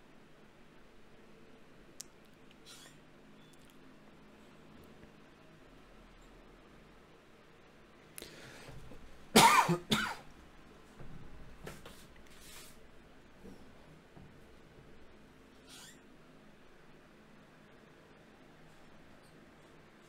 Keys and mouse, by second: 8.3-10.5 middle drag, 11.4-14.1 right drag, 12.8 f, 14.1 a, 14.3 a, 15.1 ctrl+n, 17.1 ctrl+Tab, 17.9-20.0 drag, 19.7 right click.